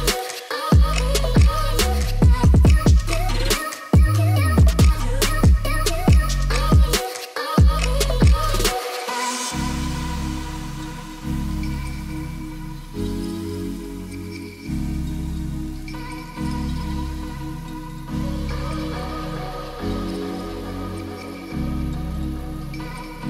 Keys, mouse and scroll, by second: 0.0 g, 0.1 y, 0.4 x, 1.2 middle drag, 1.5-1.8 middle drag, 2.4 middle click, 3.4-3.8 middle drag, 4.0 g, 4.1 y, 4.4 drag, 4.6 middle click, 5.1 middle click, 5.5 ctrl+s, 6.1 click, 6.4 g, 6.6 y, 6.9 x, 8.0 click, 8.9 middle drag, 9.1 click, 9.3-9.6 middle drag, 9.8 click, 9.9 click, 10.2 middle drag, 10.5 g, 10.6 y, 11.2-11.7 drag, 11.7 middle drag, 12.1 ctrl+s, 12.3 click, 12.9 click, 13.8 KP_1, 14.9 ctrl+s, 15.4-15.7 shift+middle drag, 18.3 click, 18.5 shift+a, 19.3 middle drag, 20.0 s, 21.3 Tab, 21.5 click, 21.9 2, 22.4 middle click, 22.7 e, 22.9 z.